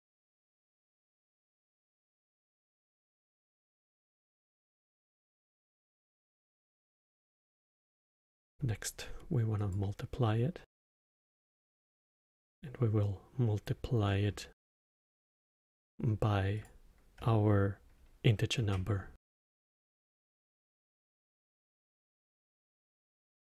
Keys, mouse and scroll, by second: 0.7 drag, 2.9 click, 5.4 click, 6.7 click, 7.2 shift+d, 8.3-10.8 drag, 12.5 drag, 14.0-14.7 middle drag, 14.7 scroll down 2, 15.1-16.5 middle drag, 16.5 click, 18.5 shift+d, 20.9 click, 22.7 drag.